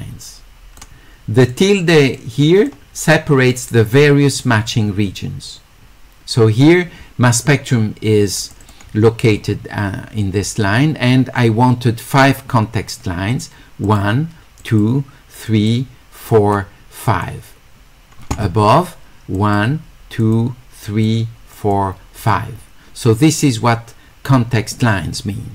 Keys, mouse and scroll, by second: 1.5 click, 2.2 click, 8.5 click, 8.6 click, 13.8 click, 14.6 click, 15.5 click, 16.3 click, 17.0 click, 19.4 click, 20.2 click, 20.8 click, 21.6 click, 22.2 click.